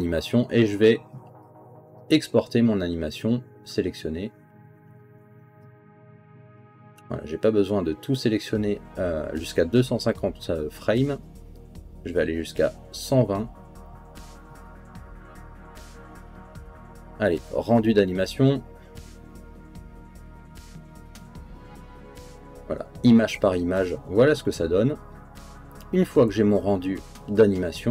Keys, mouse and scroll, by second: 4.1 click, 6.7-7.9 drag, 8.8 click, 10.0 click, 11.9 click, 15.0 click, 15.9 click, 18.2 click, 20.4-22.1 drag.